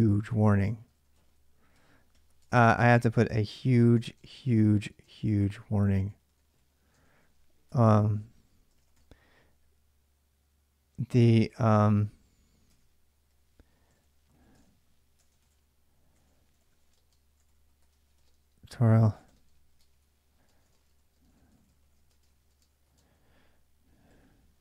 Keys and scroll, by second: 0.0-9.2 typing, 2.2 Return, 12.3-24.6 typing.